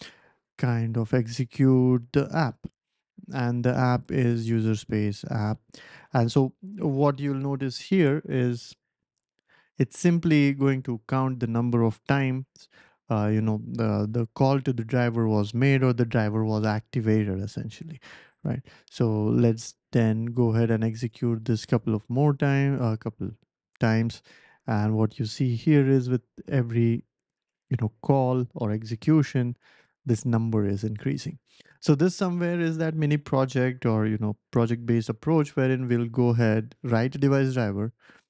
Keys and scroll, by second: 0.0-1.7 typing, 4.1 typing, 5.4 typing, 7.8 ctrl+alt+super+p, 18.0 ctrl+alt+super+p, 18.6 ctrl+alt+super+p, 19.2 BackSpace, 19.5 ctrl+alt+super+p, 20.7 Up, 21.0 Return, 21.4 Up, 21.7 Return, 22.1 Up, 22.4 Return, 22.7 Up, 23.7 Return.